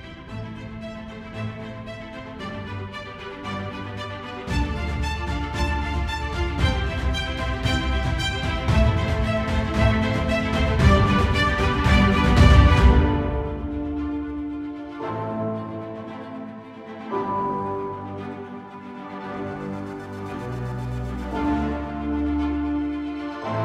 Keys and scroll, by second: 17.4 ctrl+space, 18.2 ctrl+=.